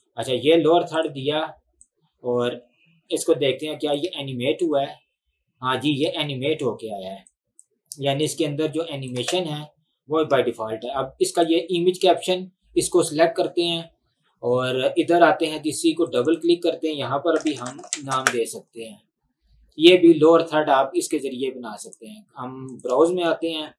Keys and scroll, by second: 4.1 space, 6.1 space, 9.2 space, 10.4 space, 17.1-18.7 typing, 23.2 Delete.